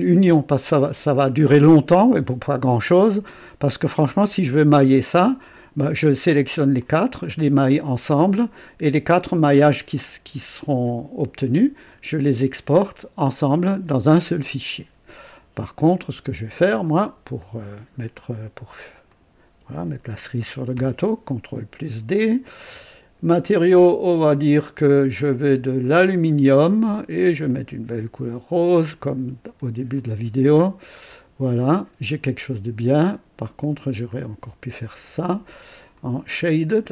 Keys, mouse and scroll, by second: 4.2-6.0 drag, 6.8 click, 17.3 click, 19.0 click, 20.7 ctrl+d, 23.5 click, 24.8 click, 25.8 click, 27.4 click, 28.8 click, 29.9 click, 31.0 click, 31.6 click, 34.0 click, 35.1 ctrl+d, 35.9 ctrl+click, 36.7 ctrl+click.